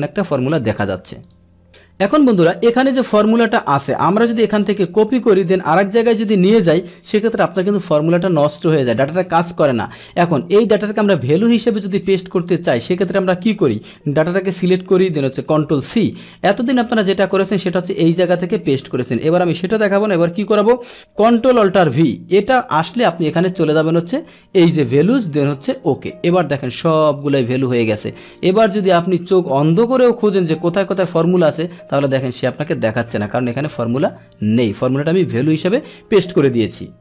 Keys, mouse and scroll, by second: 1.2 click, 1.6 click, 2.7-4.0 drag, 4.5 ctrl+c, 6.0-7.3 drag, 10.9-12.0 drag, 12.4 click, 13.0 click, 13.9 ctrl+shift+Down, 14.4 ctrl+shift+Right, 14.4 ctrl+shift+Down, 15.0 ctrl+shift+Right, 15.5 ctrl+c, 16.9 click, 18.3 click, 19.2 click, 21.8 ctrl+alt+v, 24.5 click, 25.7 click, 26.3 click, 26.7 click, 27.0 click, 27.3 click, 28.2 click, 29.0 click, 29.9 click, 33.0 Escape, 33.5 click.